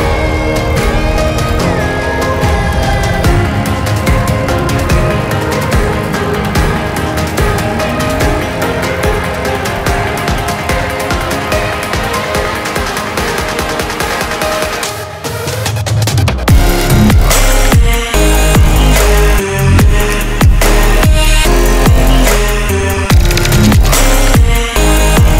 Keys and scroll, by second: 2.5 Delete, 4.6 ctrl+z.